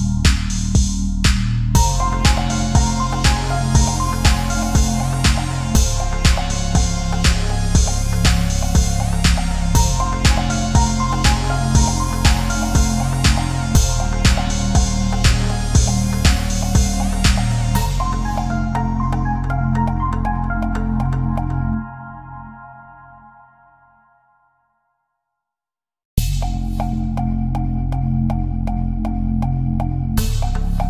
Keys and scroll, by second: 0.0 ctrl+-, 2.3 space, 9.1 space, 10.0 ctrl+=, 15.5 ctrl+-, 15.6 space, 16.5 space, 16.7 ctrl+=, 16.9 space, 18.4 ctrl+=, 26.2 Up, 26.3 Right, 26.5 Left, 26.8 Down, 27.4 Up.